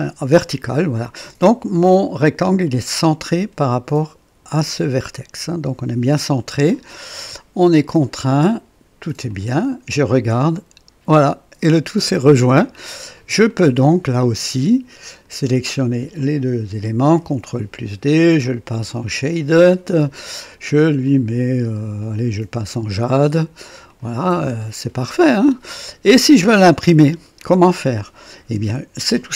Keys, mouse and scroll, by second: 0.0-0.2 typing, 6.9 click, 7.7-8.4 drag, 9.3 click, 10.5-12.5 drag, 13.0 scroll up 1, 13.5 right click, 15.1 click, 16.2 ctrl+click, 17.2 d, 18.1 ctrl+click, 19.0 ctrl+click, 21.0 click, 22.1 click, 22.7 click, 23.9 click, 24.4-26.1 drag, 26.3-27.9 drag, 27.4 right click.